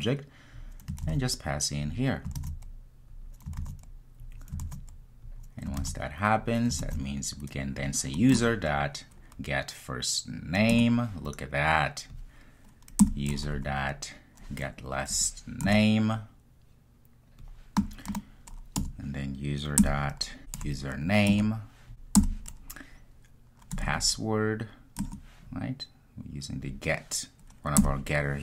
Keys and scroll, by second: 10.7 Return, 15.7 Return, 21.3 Return, 25.0 Return.